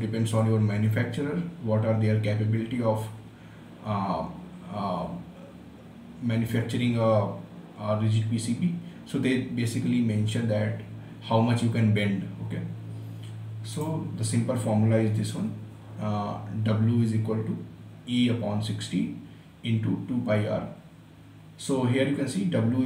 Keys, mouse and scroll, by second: 14.1 click.